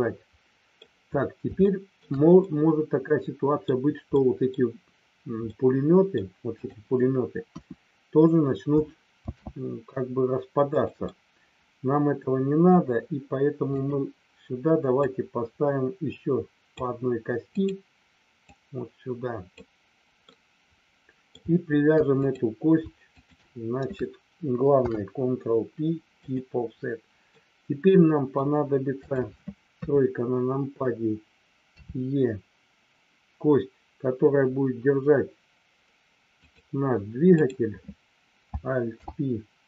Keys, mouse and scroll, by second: 1.6 shift+middle click, 2.4-3.6 middle drag, 4.1 middle click, 5.5 middle click, 6.6 click, 7.5 KP_1, 9.1 shift+d, 10.8 click, 11.1-12.6 middle drag, 13.6 click, 15.1-16.8 drag, 17.5 click, 18.5-19.5 drag, 20.2-21.2 middle drag, 23.0 shift+click, 24.8 ctrl+p, 27.4-28.4 middle drag, 28.9 click, 29.8 KP_3, 31.8 e, 36.4 click, 37.4 click, 38.9 alt+p.